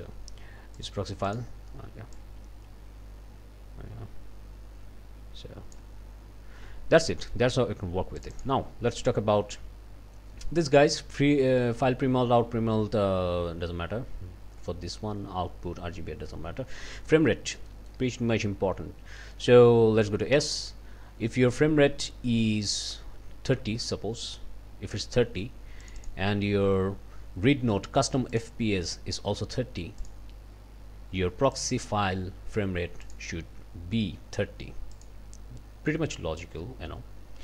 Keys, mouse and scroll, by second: 0.8 click, 1.3 click, 2.1-5.9 drag, 7.1 click, 8.2 click, 17.7 click, 19.3 click, 20.3 s, 25.8 click, 28.3 click, 30.0 click, 31.5 click, 33.0 click, 34.9 click.